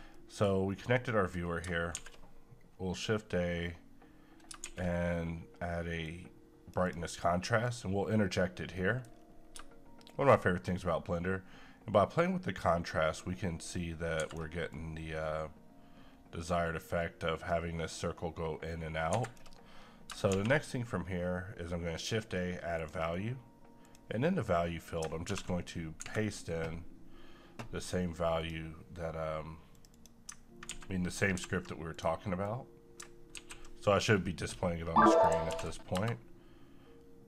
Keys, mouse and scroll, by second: 0.1 middle click, 0.6-1.0 scroll down 1, 1.0 middle click, 1.4 scroll down 1, 1.9 shift+a, 4.6 a, 6.0 click, 8.7 middle click, 9.2-9.5 scroll up 1, 10.1-14.2 shift+drag, 14.2 shift+Escape, 14.7-19.1 shift+drag, 19.1 shift+Escape, 20.3 a, 21.9 click, 25.3 v, 26.0 Escape, 28.4 click, 30.7 ctrl+a, 31.4 ctrl+c, 31.9 click, 33.3 c, 35.1 click, 35.5 ctrl+v.